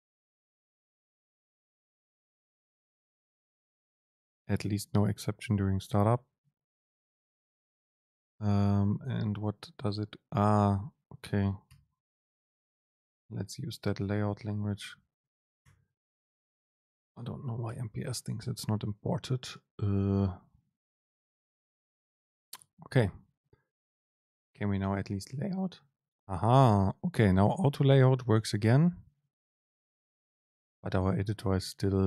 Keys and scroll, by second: 13.2 super+l.